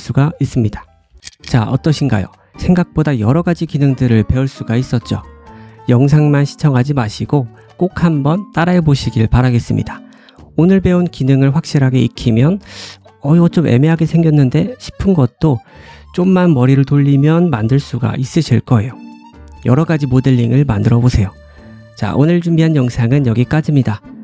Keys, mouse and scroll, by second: 3.8-10.1 drag, 10.2-12.1 drag, 11.7 scroll up 1, 12.1 middle click, 13.4 ctrl+z, 14.0 middle click, 15.2 a, 16.3 click, 20.9-24.2 drag, 23.4 middle click, 24.1 Tab.